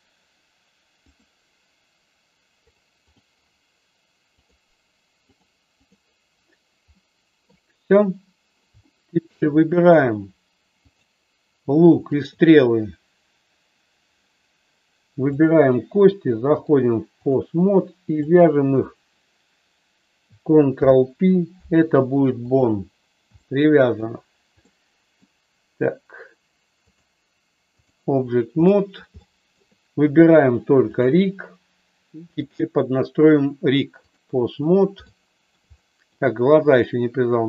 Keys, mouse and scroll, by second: 2.6 click, 3.0 click, 5.4 click, 7.0 middle click, 8.7 shift+middle click, 10.9 click, 12.1 shift+click, 15.2 shift+click, 16.5 click, 18.3-19.5 drag, 20.6 ctrl+p, 23.3 shift+middle click, 24.6 middle click, 27.0 click, 28.6 middle click, 29.2 shift+middle click, 32.4-34.2 drag, 35.0 shift+middle click, 35.7 middle click, 36.7-37.4 drag.